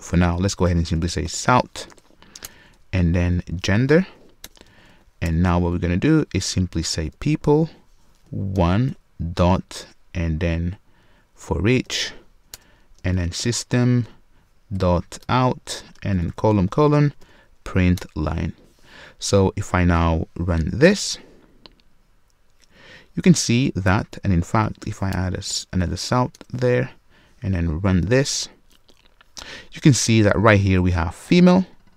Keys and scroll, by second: 2.4 Return, 8.5 Return, 20.7 Return, 26.3 Return, 27.8 shift+F10.